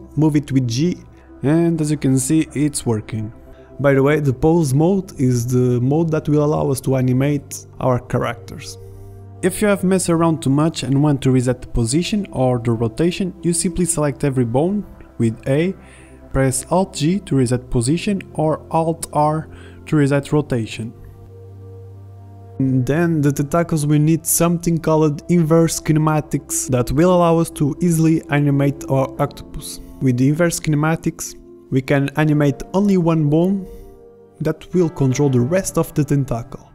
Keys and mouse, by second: 1.9 r, 6.0 r, 10.2 g, 11.9 a, 12.1 a, 14.3 alt+g, 16.5 alt+r, 16.5 a, 17.7 r, 18.6 a, 18.7 a, 19.6 alt+r, 22.1 a, 35.6 Tab.